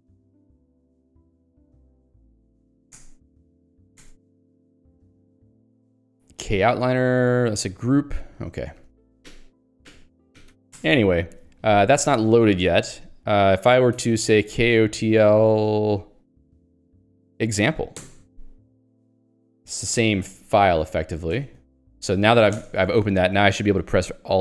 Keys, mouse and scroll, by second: 0.6 super+e, 1.3 ctrl+s, 1.3-2.5 typing, 3.0 Return, 4.1 Return, 4.4 ctrl+s, 4.6 k, 4.9 u, 7.2 t, 8.2 ctrl+j, 8.6 ctrl+g, 9.5 ctrl+alt+j, 10.8 Return, 11.0 Escape, 12.0 h, 14.0 alt+x, 14.2-15.5 typing, 15.8 ctrl+j, 18.5 Return, 20.0 ctrl+d, 23.1 Return, 23.7 k.